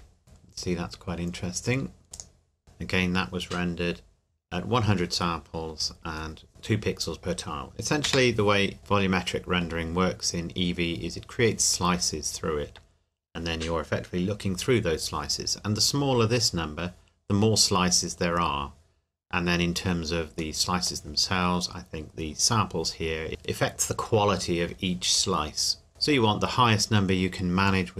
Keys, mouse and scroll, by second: 2.1 click, 8.0 Escape, 8.8 middle click, 9.9-12.0 scroll up 1, 20.6 middle click, 25.9 middle click.